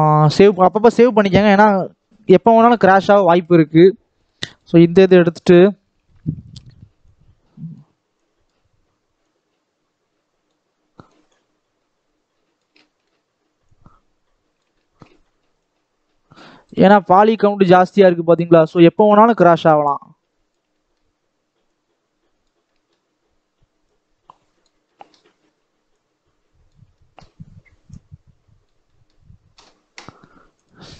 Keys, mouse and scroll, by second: 1.3 middle click, 1.9 scroll up 2, 2.8-4.1 shift+middle drag, 4.1-5.1 drag, 5.1 KP_7, 5.4-5.8 scroll up 2, 5.8 scroll down 1, 6.0 shift+middle click, 6.2-6.9 scroll up 2, 7.0-12.7 drag, 12.7 shift+middle click, 13.6-14.7 drag, 14.7 shift+middle click, 15.4-16.8 drag, 16.8 shift+middle click, 17.6-18.7 drag, 18.7 shift+middle click, 19.6-20.6 drag, 20.6 shift+middle click, 21.6-22.6 drag, 22.6-23.8 shift+middle drag, 23.8 click, 24.7-25.9 shift+middle drag, 25.9 click, 26.8 shift+middle click, 27.8-28.8 drag, 28.8-30.9 shift+middle drag.